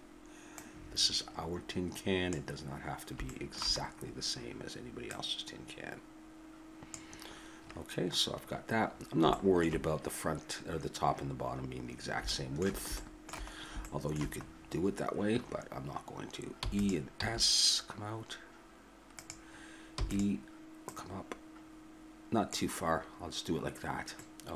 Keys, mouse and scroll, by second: 0.6-2.1 drag, 3.3-5.1 middle drag, 5.1-6.9 drag, 8.9-11.2 middle drag, 11.9 middle click, 13.0 middle click, 16.5 e, 17.1 s, 19.9 e, 20.9-23.2 drag, 24.1-24.5 middle drag.